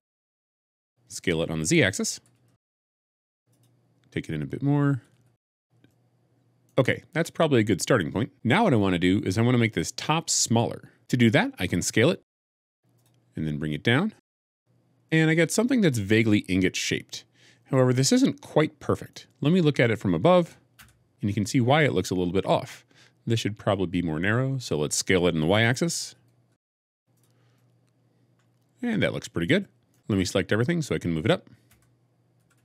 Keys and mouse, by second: 0.0 x, 2.0 s, 2.2 z, 4.8 s, 5.0 x, 5.8 middle click, 9.5 middle click, 11.0 Escape, 12.1 s, 14.1 g, 14.2 z, 15.0-16.2 middle drag, 17.8-19.0 middle drag, 20.7 KP_7, 26.3 s, 26.3 y, 27.0 click, 27.4 middle click, 28.6 middle click, 28.8 middle click, 29.8-31.6 middle drag, 31.6 a, 32.5 g, 32.5 z.